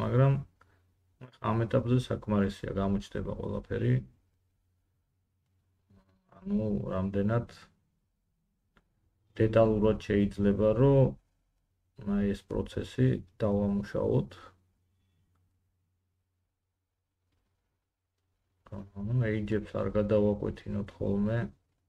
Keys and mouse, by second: 10.4 Tab, 16.3 g, 18.5 click, 18.8 g, 21.3 click, 21.6 g.